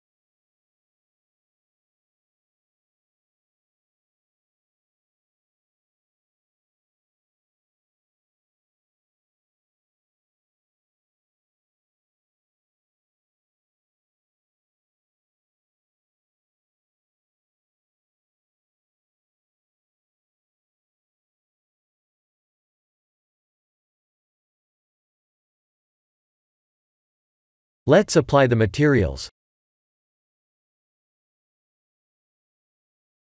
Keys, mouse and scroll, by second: 0.4 KP_1, 1.2 KP_3, 1.7 shift+z, 2.9 1, 3.3 click, 3.7 b, 5.9 click, 7.3 click, 10.3 shift+z, 10.9 click, 11.3 middle click, 12.0 click, 12.6 Tab, 13.1 click, 14.5-15.1 scroll down 3, 15.0 middle click, 18.3-18.8 scroll down 3, 18.6 middle click, 22.7-23.9 scroll up 8, 23.9 scroll down 1, 24.2 scroll down 8, 25.8 scroll down 1, 27.0 click, 28.8 click, 31.7 click.